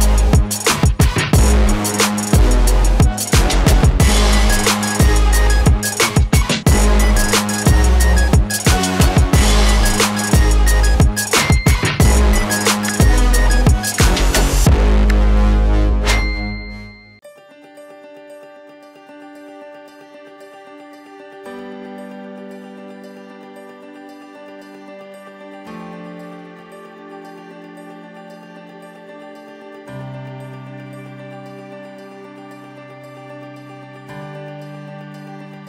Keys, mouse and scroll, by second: 4.2 click, 7.2-13.1 drag, 18.0-23.7 drag, 23.7 scroll up 1, 26.2-31.0 drag, 33.3 click.